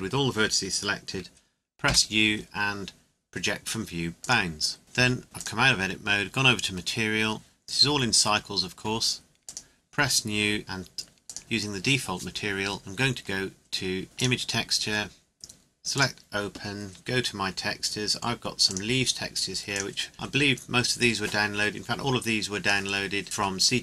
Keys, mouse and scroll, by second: 4.0 u, 4.2 click, 4.8 Tab, 5.4 click, 9.4 click, 14.2 click, 18.7 click.